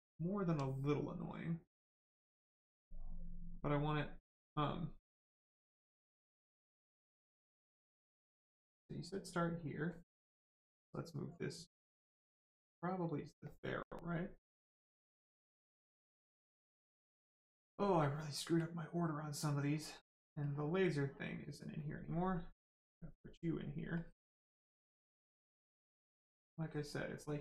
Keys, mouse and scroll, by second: 0.0 alt+right click, 1.2 click, 1.3 click, 7.3 click, 9.2 click, 10.3 click, 13.9 right click, 15.1 alt+right click, 15.5 right click, 15.6 right click, 16.3 click, 17.6 right click, 18.5 click, 23.9 click.